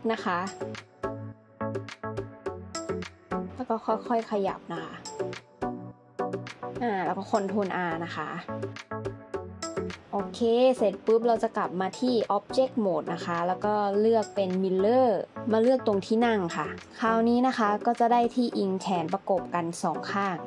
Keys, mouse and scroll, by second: 6.7 ctrl+r, 19.7 shift+d.